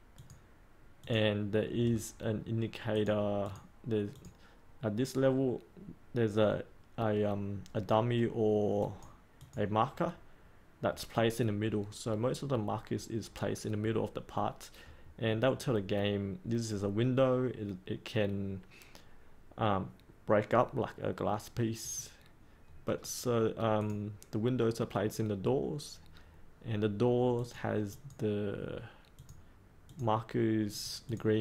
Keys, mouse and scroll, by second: 1.8-2.9 scroll up 1, 2.9 click, 22.7 scroll up 1, 23.7-30.6 drag.